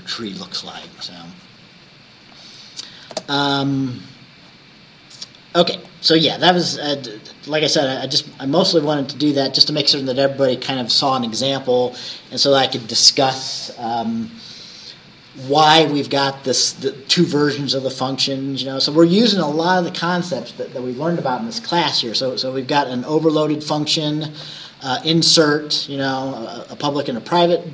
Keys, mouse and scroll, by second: 2.4 click, 3.2 space, 4.3 scroll down 1, 5.9 click, 6.9-8.2 scroll down 3, 8.4-8.7 scroll down 1, 9.3 scroll down 2, 21.9-23.5 drag, 23.7-27.3 drag.